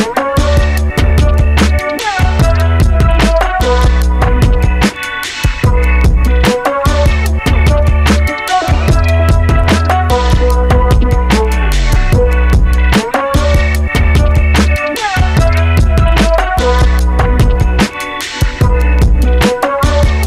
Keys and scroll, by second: 2.3 Return.